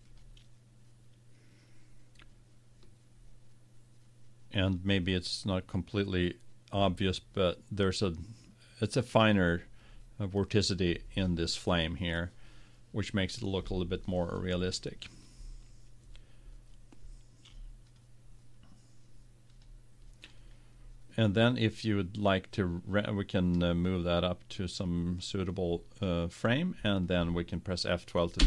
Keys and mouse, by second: 0.1-2.2 drag, 5.6-8.2 middle drag, 18.4-22.2 drag, 25.3-27.0 drag.